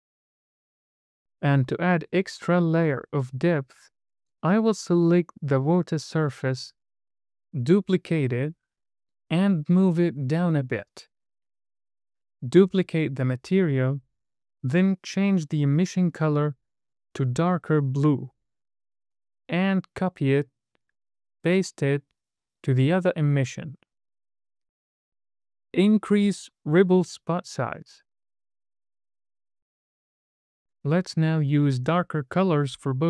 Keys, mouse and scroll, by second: 6.0 click, 7.1 shift+d, 8.6 right click, 9.6 click, 13.4 click, 15.2 click, 19.9 super+c, 20.3-21.0 scroll down 3, 20.5 middle click, 21.5 scroll up 2, 21.7 middle click, 22.8 super+v, 23.5-23.8 scroll down 3, 23.7 middle click, 24.5 scroll down 2, 24.7 middle click, 24.9-25.5 scroll up 3, 25.4 middle click, 27.2 click, 28.2-30.2 drag, 30.7 scroll down 2, 31.0 middle click, 31.4 scroll up 2, 31.7 click.